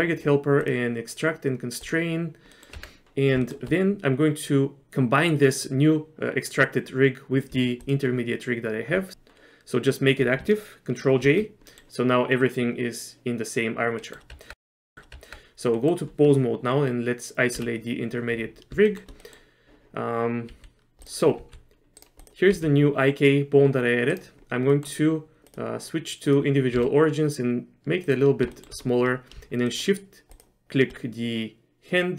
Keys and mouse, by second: 0.8-2.3 drag, 2.6 click, 2.8 Tab, 3.5 shift+click, 7.9 ctrl+click, 11.3 ctrl+j, 11.8 middle click, 13.1-15.1 middle drag, 15.2 Tab, 15.8 middle click, 19.0 shift+middle click, 19.3 middle click, 20.6 z, 21.5 g, 22.6 g, 24.8 middle click, 25.6 click, 26.9 s, 28.7 shift+middle click, 29.9 shift+middle click.